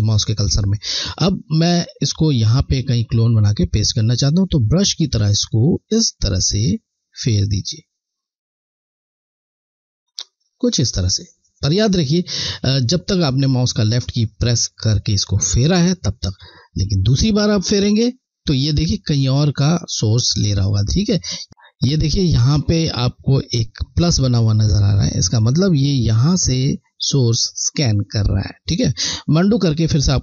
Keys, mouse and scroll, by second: 3.2 alt+click, 3.7 click, 17.4 click, 25.3 click, 29.4 ctrl+z.